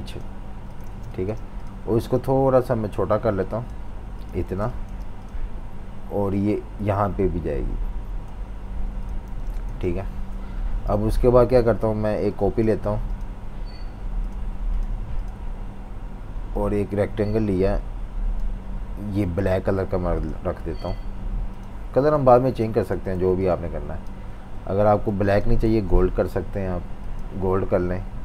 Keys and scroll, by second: 0.8 typing, 4.4 typing, 9.2 typing, 22.3-24.5 typing, 25.6 super+z.